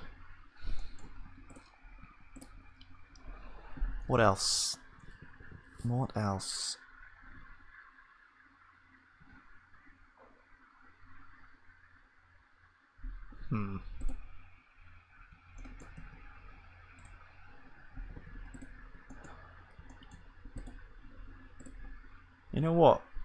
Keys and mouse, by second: 0.9-3.2 drag, 15.1-18.2 drag, 18.2 ctrl+s, 19.3-23.2 drag.